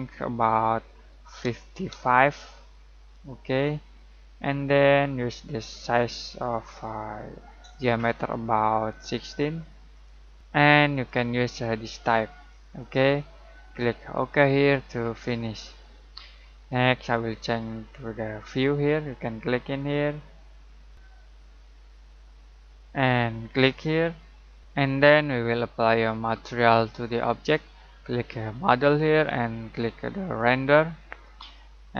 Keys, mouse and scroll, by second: 1.2-1.9 typing, 6.0 click, 9.0 typing, 9.9 click, 12.7 click, 17.6 typing, 19.8 click, 19.8 typing, 23.6 click, 23.6 typing, 28.5 click, 28.5 typing.